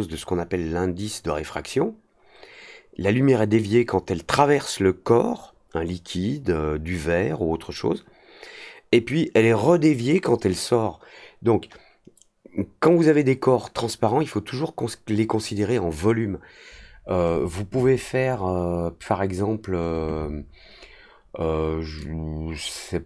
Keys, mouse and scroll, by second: 21.9-23.0 drag.